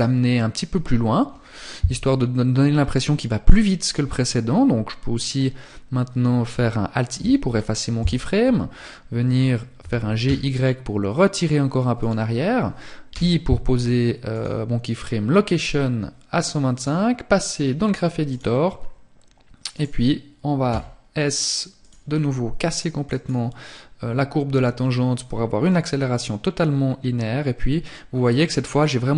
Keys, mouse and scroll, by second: 4.2-5.2 scroll down 1, 11.1 click, 12.1 i, 15.7 click, 22.2 click, 23.1-23.5 scroll up 1, 23.5 scroll down 1, 24.7 click.